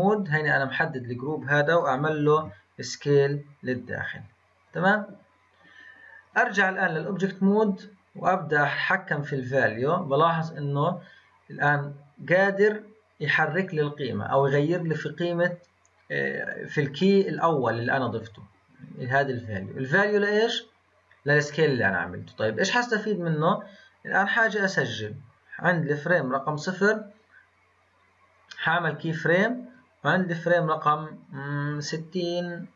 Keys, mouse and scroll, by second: 2.3 s, 6.3-11.3 drag, 19.1-22.2 drag, 24.2-28.6 drag, 29.7-32.7 drag.